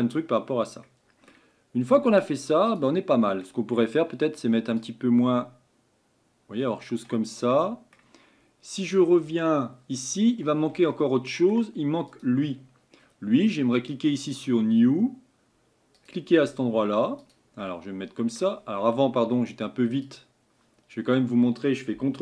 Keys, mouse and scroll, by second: 3.5-11.7 drag, 15.8-20.2 drag.